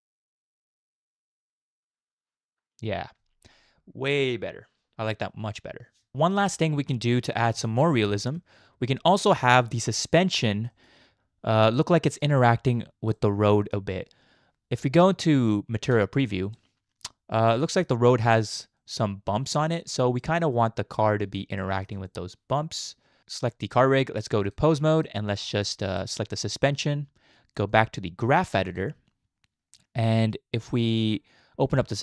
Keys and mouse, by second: 6.1 space, 6.5 middle click, 7.4 KP_Decimal, 7.9-8.4 middle drag, 9.1-10.4 middle drag, 10.7 shift+middle click, 11.8-12.2 middle drag, 12.5 shift+middle click, 13.2-15.0 middle drag, 15.0 z, 16.6-17.9 middle drag, 18.2 middle click, 18.8-19.2 middle drag, 20.2-21.4 middle drag, 21.7 shift+middle drag, 22.1-23.2 middle drag, 24.6 click, 25.4 click, 26.0 shift+middle click, 26.3 middle click, 27.9-28.9 drag, 31.6 click.